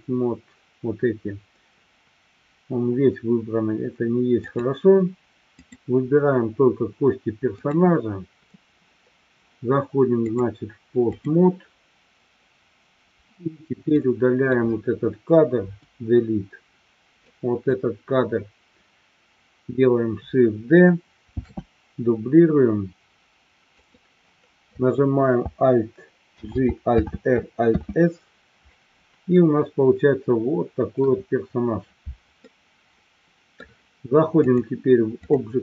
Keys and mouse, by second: 4.4 click, 5.4 click, 7.7 click, 10.3-11.3 drag, 13.9-14.5 drag, 15.8 Delete, 17.2-17.7 drag, 21.4 shift+d, 24.1 click, 26.6 alt+g, 27.2 alt+r, 27.8 alt+s, 29.4-30.9 middle drag, 32.5-33.6 middle drag, 34.5-35.5 drag.